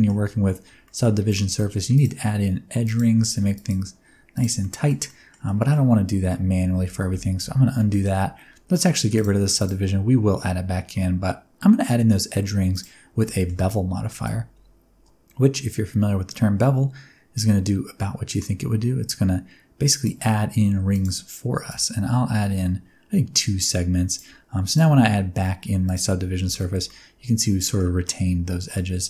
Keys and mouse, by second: 0.8 middle click, 1.4 ctrl+r, 2.8 click, 3.2 ctrl+r, 4.3 click, 4.7 middle click, 5.1 middle click, 5.5 middle click, 6.7 ctrl+z, 6.9 ctrl+z, 7.0 ctrl+z, 7.7 middle click, 9.6-12.8 drag, 13.3 shift+middle click, 14.1-20.0 shift+drag, 20.8 click, 21.6-24.1 shift+drag, 24.7-25.9 drag, 26.5 middle click, 26.8 middle click, 28.0 middle click.